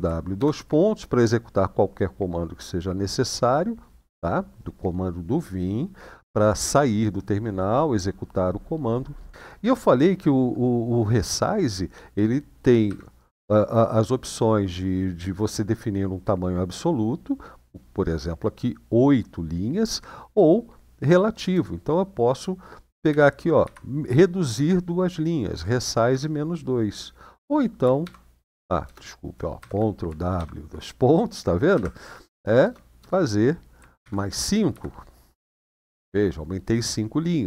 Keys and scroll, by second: 0.1 :, 12.6 Up, 21.3 BackSpace, 22.8 -, 23.3 2, 25.8 Return, 27.8 :, 29.3 ctrl+w, 30.1 shift+;, 31.5 Up, 32.3 BackSpace, 32.7 BackSpace, 34.5 5, 35.1 Return.